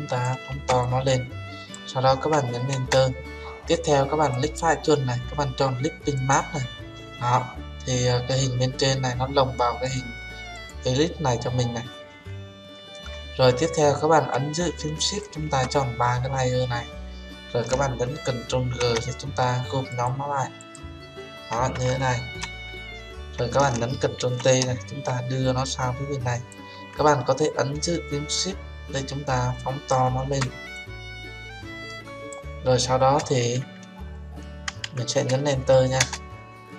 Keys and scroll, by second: 2.7 Return, 18.6 ctrl+g, 24.1 ctrl+t, 36.1 Return.